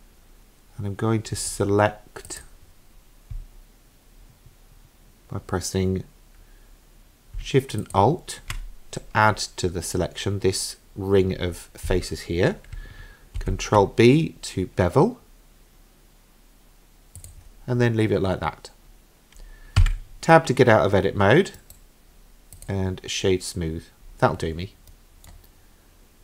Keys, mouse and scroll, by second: 2.3 click, 7.8 alt+shift+click, 13.4 ctrl+b, 19.8 Tab, 21.6 right click, 23.8-24.8 scroll down 4, 24.9 middle click.